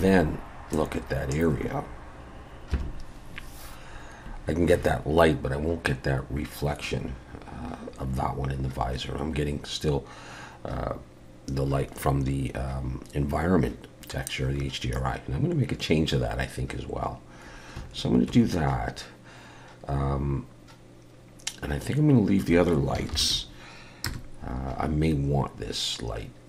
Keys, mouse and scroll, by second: 2.8 F12, 23.2 ctrl+alt+b, 24.1 KP_0.